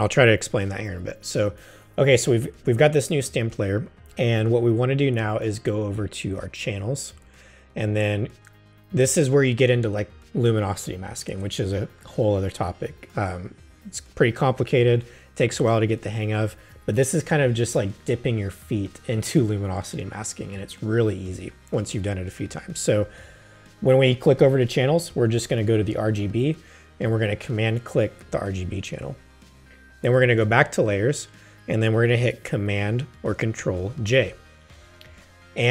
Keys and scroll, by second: 33.9 super+j.